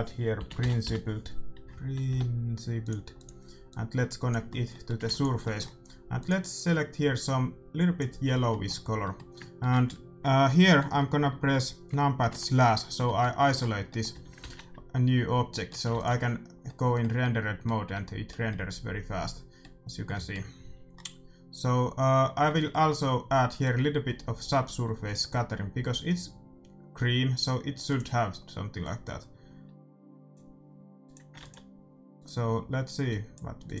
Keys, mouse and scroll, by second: 3.6-5.5 drag, 4.6-7.7 middle drag, 5.0 ctrl+s, 6.1-8.0 drag, 8.2-12.2 middle drag, 14.1 a, 14.5 shift+z, 15.8 ctrl+s, 23.6-25.5 drag, 27.9-29.7 drag, 31.0-33.8 drag, 31.3 ctrl+s.